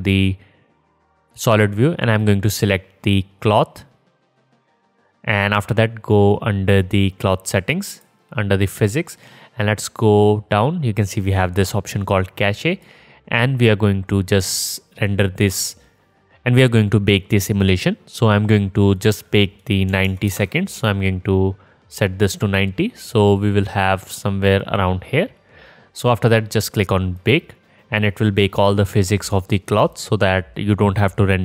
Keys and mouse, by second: 0.1 middle click, 0.4-3.1 drag, 3.4-8.9 drag, 9.0-13.4 drag, 30.2-31.4 middle drag.